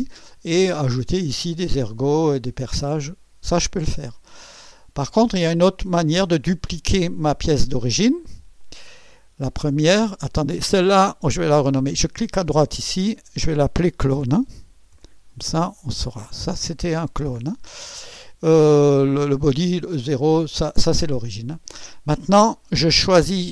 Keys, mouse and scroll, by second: 8.6 click, 10.0 click, 12.4 click, 13.0 F2, 14.3-17.4 typing, 16.4 Return.